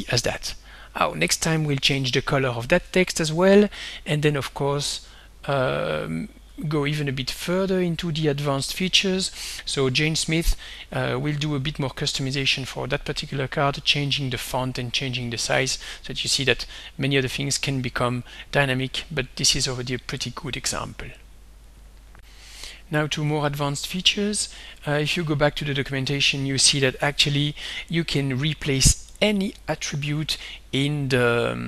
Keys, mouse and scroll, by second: 1.6 click, 2.8 click, 5.8 click, 16.1-18.9 drag, 21.7 click, 22.2 click, 22.6 alt+Tab, 23.3 alt+Tab, 25.5-26.1 scroll down 2, 26.2-27.1 scroll down 2, 27.6 scroll down 2.